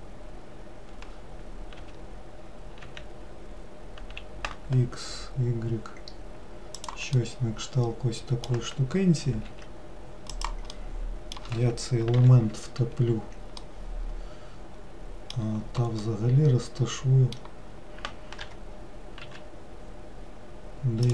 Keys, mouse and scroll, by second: 7.3-9.6 middle drag, 9.6 s, 10.8-12.3 middle drag, 12.3 ctrl+l, 13.7-18.5 middle drag, 18.5 g.